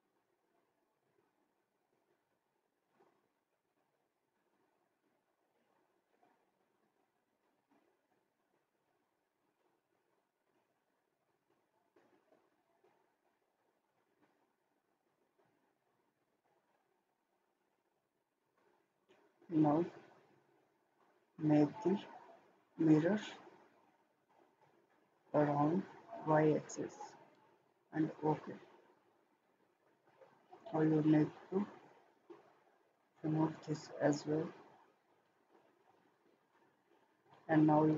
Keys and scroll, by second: 36.8 Escape.